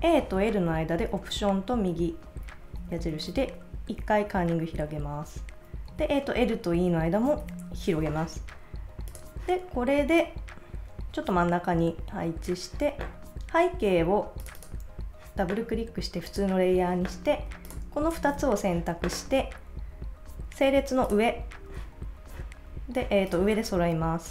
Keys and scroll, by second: 3.0 alt+-, 5.9 Right, 7.4 alt+-.